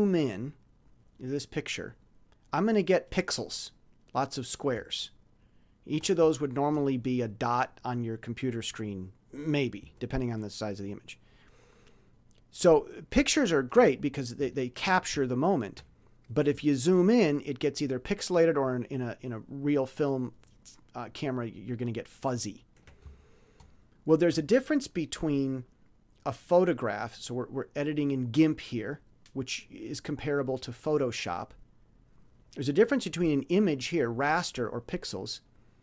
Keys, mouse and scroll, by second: 0.9 ctrl+scroll up 2, 2.7-3.0 ctrl+scroll up 2, 4.8-5.1 shift+scroll down 2, 5.5-5.9 shift+scroll up 2, 6.3-6.6 shift+scroll down 2, 10.1-10.7 ctrl+scroll down 4, 11.0 ctrl+scroll down 2, 12.0-12.3 ctrl+scroll down 2, 12.6 ctrl+scroll down 2, 13.4 ctrl+scroll up 2, 14.7 ctrl+scroll up 2, 15.4 shift+scroll up 2, 16.1 shift+scroll down 2, 16.7-17.5 ctrl+scroll up 4, 17.7 ctrl+scroll up 2, 18.5-18.9 ctrl+scroll down 2, 19.1 ctrl+scroll down 2, 19.6 ctrl+scroll down 2, 20.2 ctrl+scroll down 2, 20.9 ctrl+scroll up 2, 21.7 ctrl+scroll down 2, 22.4 ctrl+scroll down 2, 23.2 ctrl+shift+scroll up 2, 26.7-28.4 drag, 28.8 click.